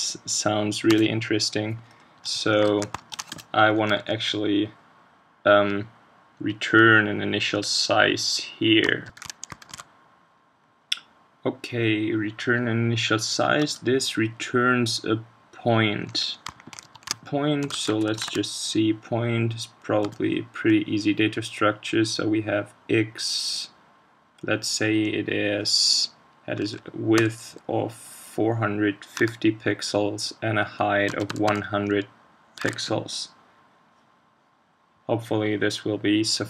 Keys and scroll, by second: 2.6 super+Right, 16.5 shift+super+Right, 18.2 ctrl+space, 32.6 super+s.